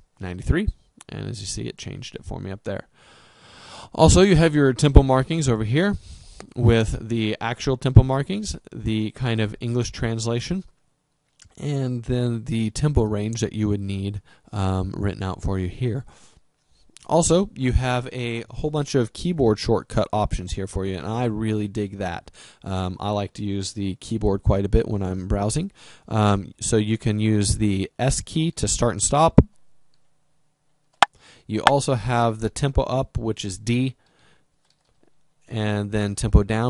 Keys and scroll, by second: 29.3 s, 34.4 d.